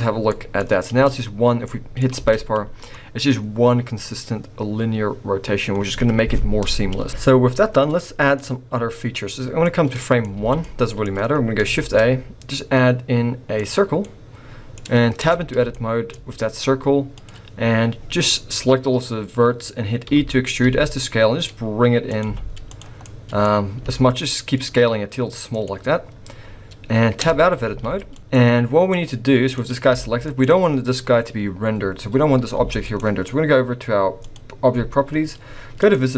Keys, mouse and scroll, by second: 0.1 scroll down 3, 0.3 middle click, 0.6-1.7 scroll up 4, 0.9 v, 1.7 middle click, 2.1 space, 7.1 space, 8.4 click, 9.9 middle click, 10.3 alt+a, 10.6 middle click, 11.8 shift+a, 14.0 middle click, 15.2 Tab, 15.7 shift+middle click, 17.2 click, 20.1 e, 22.2 z, 23.0 middle click, 23.8 s, 27.2 Tab, 27.7 z, 28.3 middle click, 29.6 click, 29.9 g, 32.6 g, 34.2 click, 35.8 click.